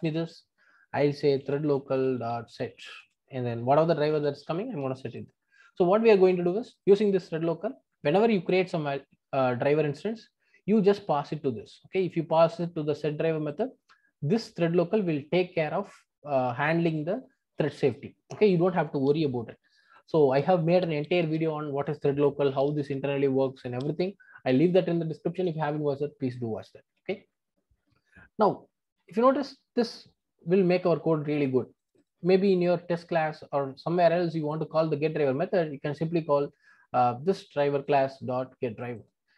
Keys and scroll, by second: 2.1 Return.